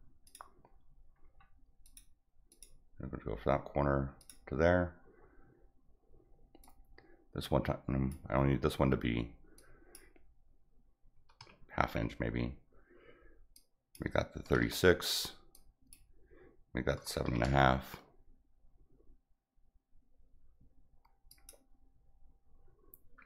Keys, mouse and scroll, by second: 0.2 click, 1.2 middle click, 1.8 click, 2.4 click, 4.1 click, 6.6-8.0 drag, 9.5 click, 13.6 click, 15.5 click, 21.3 click.